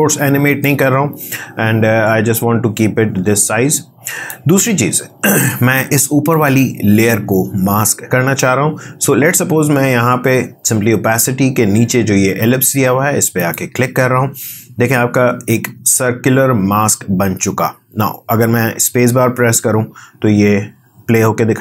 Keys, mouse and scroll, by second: 0.6-6.3 drag.